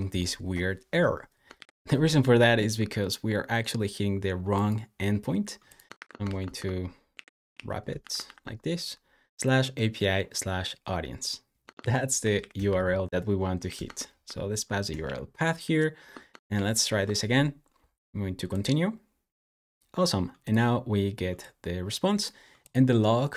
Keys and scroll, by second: 1.4 super+j, 5.6-9.3 typing, 11.2-14.2 typing, 14.8 super+s, 16.3 super+j.